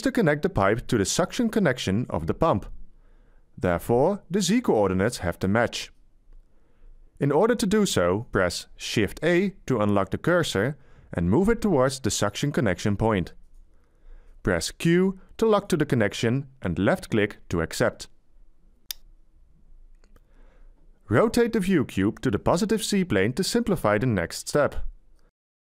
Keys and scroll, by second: 11.6 shift+a.